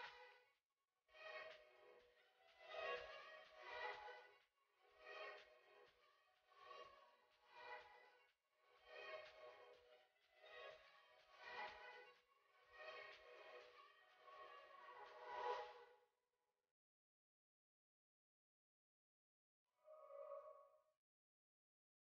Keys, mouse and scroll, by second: 0.1 click, 2.5 scroll up 1, 2.9 click, 3.9-4.3 scroll up 1, 4.3 click, 7.0 click, 9.5-10.3 scroll down 1, 10.3 click, 12.7 click, 14.5 click, 17.2 s, 18.2-22.1 drag.